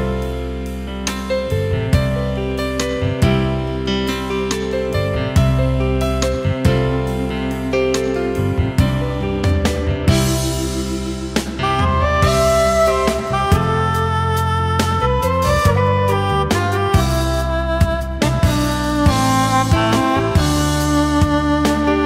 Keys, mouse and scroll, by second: 5.7-6.1 alt+scroll up 1.